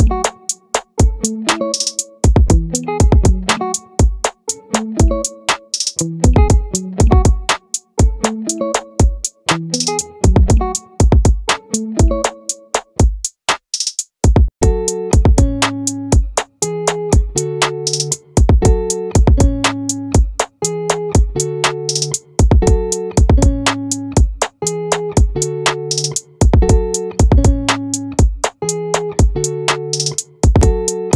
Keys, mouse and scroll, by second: 4.9-6.5 middle drag, 6.5-7.5 drag, 8.1 middle click, 13.6 middle click, 19.5-22.4 middle drag, 23.0 z, 25.6 a.